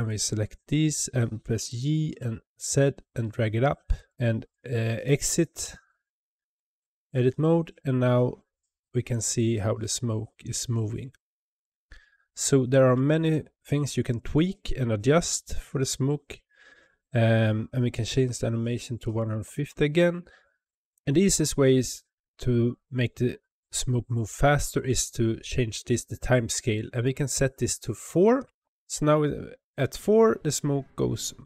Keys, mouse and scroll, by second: 1.5 g, 5.4 Tab, 17.8-20.9 drag, 26.9-28.7 drag.